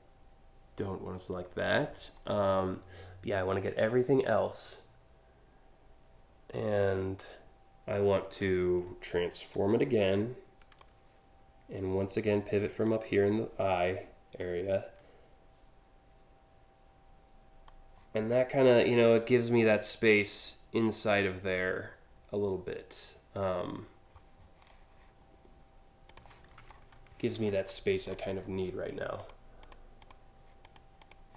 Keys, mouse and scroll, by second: 9.2 ctrl+t, 10.4-12.5 drag, 14.0-17.3 drag, 25.7 click, 26.3 scroll up 3, 27.1 alt+scroll up 1, 27.7 alt+scroll up 1, 28.8 click, 29.2 click, 29.7 click, 30.3 click, 30.6 click.